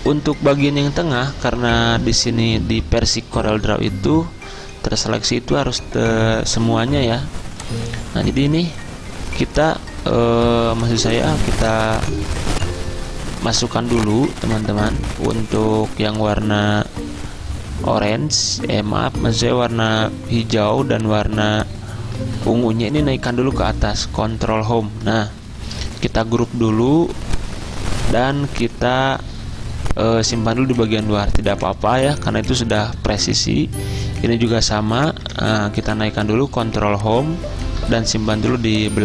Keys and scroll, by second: 10.3 ctrl+z, 16.7 ctrl+z, 22.3 ctrl+z, 24.5 ctrl+Home, 26.3 ctrl+g, 35.3 ctrl+Home.